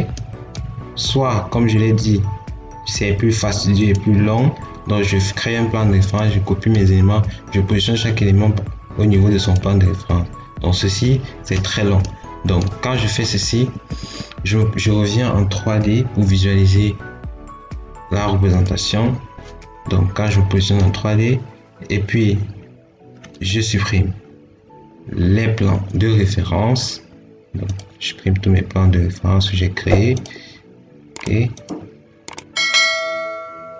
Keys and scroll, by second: 13.4 Escape.